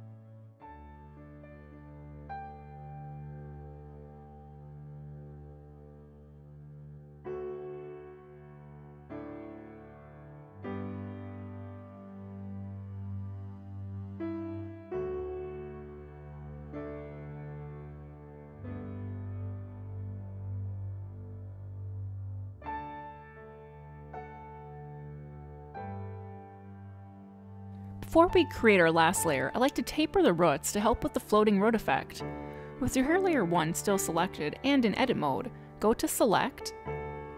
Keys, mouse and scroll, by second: 0.9 g, 2.8 w, 3.4 click, 3.5 g, 4.1 click, 4.1 g, 4.5 scroll down 1, 4.7 middle click, 5.1 click, 5.6 click, 5.7 g, 5.8 click, 6.0 g, 6.4 click, 6.5 g, 7.3 click, 7.7 click, 7.8 g, 8.4 click, 8.4 g, 9.6 click, 9.7 middle click, 10.3 click, 10.5 g, 11.0 click, 11.2 g, 11.5 click, 11.6 g, 12.2 click, 12.3 g, 12.7 middle click, 12.9 scroll down 1, 13.0 middle click, 13.3 middle click, 13.6 middle click, 13.9 middle click, 14.2 middle click, 14.4 click, 14.5 g, 14.7 middle click, 15.1 click, 15.3 click, 15.4 middle click, 15.6 g, 16.3 middle click, 16.7 click, 16.8-19.0 typing, 17.1 middle click, 17.6 click, 18.0 click, 18.5 click, 18.9 click, 19.6 ctrl+z, 19.7 middle click, 20.0 middle click, 20.4 middle click, 20.5 click, 20.6 middle click, 21.0 g, 21.4 middle click, 21.5 click, 21.7 g, 22.1 click, 22.1 g, 22.5 click, 22.6 g, 22.8 middle click, 23.7 middle click, 23.7 click, 24.1 middle click, 24.2 g, 24.6 middle click, 25.1 click, 25.2 middle click, 25.5 g, 25.9 middle click, 34.2 click, 35.6 click.